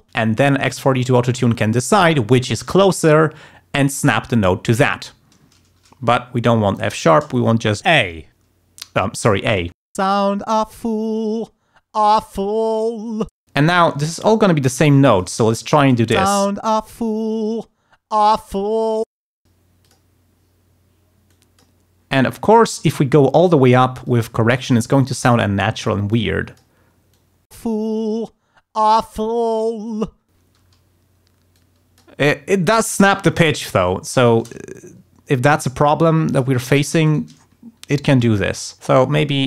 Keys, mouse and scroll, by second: 6.7 shift+right click, 9.1 click, 10.1 space, 13.4 space, 13.5 click, 13.9 e, 14.4 click, 16.2 space, 18.0 d, 19.2 space, 19.3 click, 19.8 click, 21.3 click, 22.9 click, 24.1 click, 25.3 click, 26.1 click, 27.1 click, 27.6 space, 30.6 space, 31.6 click, 32.8 click, 33.7 shift+click, 34.2 shift+right click, 35.5 click, 36.3 click, 37.1 shift+right click, 37.9 alt+click, 38.6 alt+click, 39.0 e.